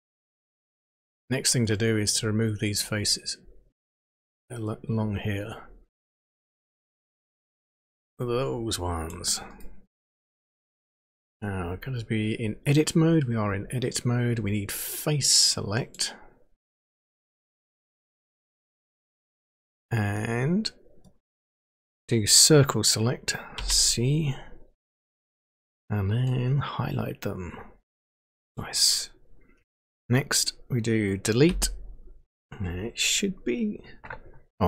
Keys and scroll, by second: 23.6 c, 31.5 Delete.